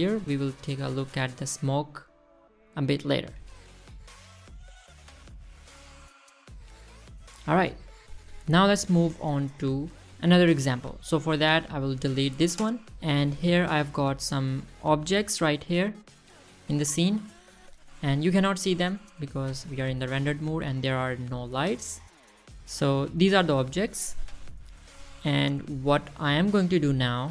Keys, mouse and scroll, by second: 0.9-1.2 scroll down 3, 1.3 shift+middle click, 1.6 middle drag, 2.0 shift+middle drag, 2.6 space, 2.9 space, 3.6 click, 3.9 space, 7.6 space, 12.0 click, 13.3 click, 13.8 click, 14.1 Delete, 15.6 click, 16.9-17.4 drag, 18.5 click, 19.5 scroll down 2, 19.7 middle drag, 20.7 click, 21.0 middle click, 21.3 scroll down 2, 21.5 middle drag, 22.2 middle drag, 22.8 middle drag, 23.4-24.2 middle drag.